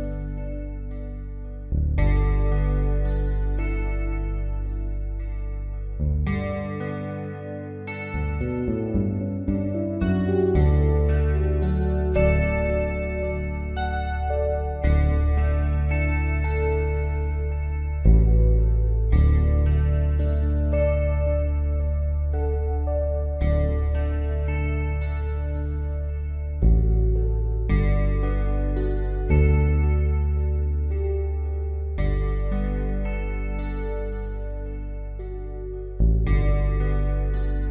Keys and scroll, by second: 17.7 b, 20.5 ], 21.1 ], 22.2 b, 29.7-31.8 typing.